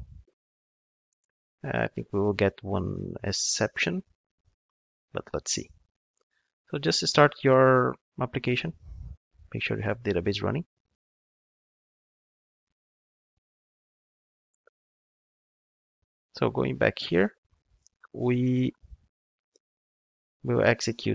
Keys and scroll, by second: 8.1 ctrl+shift+d.